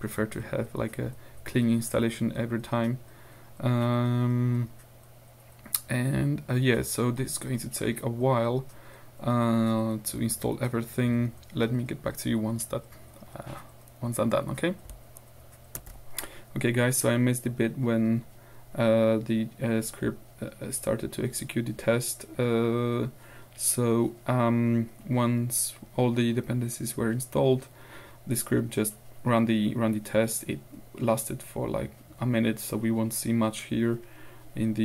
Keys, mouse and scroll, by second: 15.8 ctrl+alt+r, 18.9-19.3 scroll down 2, 19.4 Down, 21.4 Down, 22.1-22.5 scroll down 2, 24.5 Up, 24.7-25.4 scroll up 2, 27.0-27.4 scroll down 2, 27.7-29.3 scroll down 2, 29.9 scroll down 2.